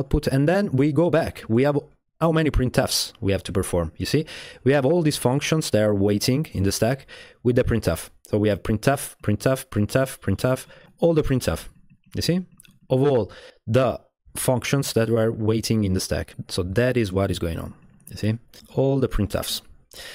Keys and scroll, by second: 18.6-19.5 typing.